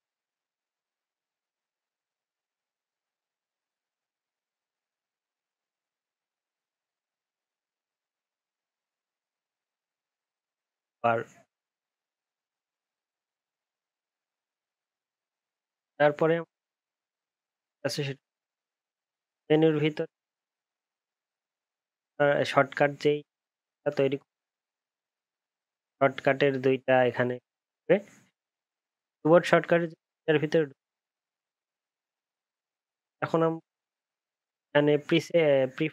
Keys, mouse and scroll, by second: 6.7 ctrl+s, 8.3 ctrl+s.